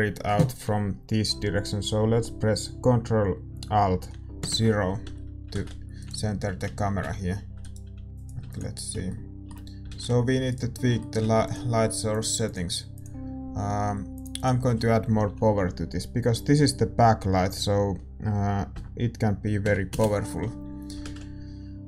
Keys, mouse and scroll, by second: 5.6 ctrl+alt+KP_0, 5.6 shift+z, 6.4-8.0 right drag, 6.4 g, 8.0 ctrl+s, 8.2-10.0 drag, 8.4 ctrl+s, 9.2 right click, 10.0-21.8 middle drag, 10.0 shift+z, 20.5-21.8 right drag.